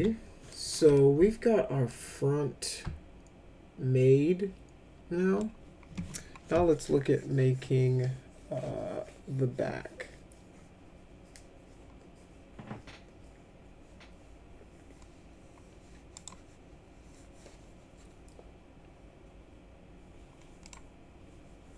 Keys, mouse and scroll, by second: 0.5 middle click, 1.0 alt+middle click, 2.7-5.4 alt+middle drag, 16.2 right click, 20.7 click.